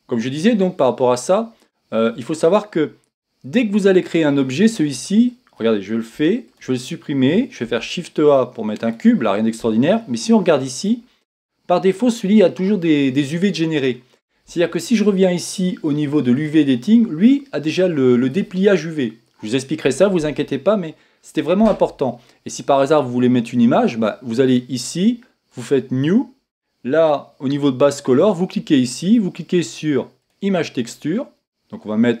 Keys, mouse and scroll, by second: 0.0 click, 1.0-1.4 scroll up 3, 1.4-2.4 scroll down 3, 2.4-4.8 scroll down 1, 4.8 scroll down 1, 6.6 x, 8.9 shift+a, 16.5-27.9 drag, 30.3-32.2 drag.